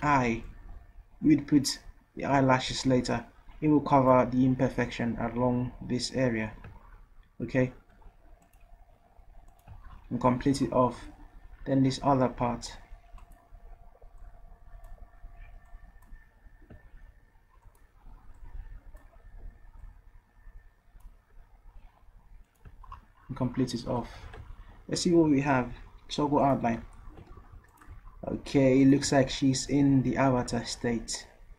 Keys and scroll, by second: 0.1 ctrl+z, 24.2 v, 27.5 v.